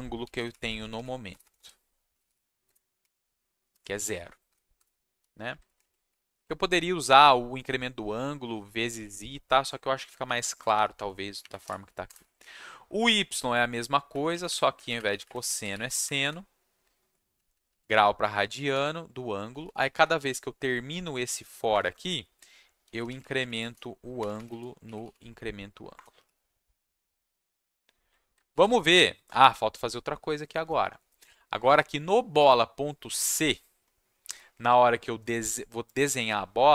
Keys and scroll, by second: 0.0-5.2 typing, 5.6 ctrl+shift+Down, 6.3 Right, 10.2 Left, 10.9 Right, 11.6 u, 12.0 BackSpace, 12.1 y, 12.4 Right, 14.1 Right, 14.3 Left, 14.4 Left, 14.7 Right, 14.9 shift+Left, 15.1 shift+Left, 15.2 shift+Left, 15.3-16.3 typing, 17.3 Left, 17.5 Left, 17.6 Left, 17.9 Right, 18.4 Right, 18.5 Right, 18.7 Right, 19.5 Down, 19.6 Down, 19.7 Down, 20.0 Down, 21.4 /, 21.7 Return, 22.6-26.1 typing, 25.9 Return, 28.5 ctrl+shift+s.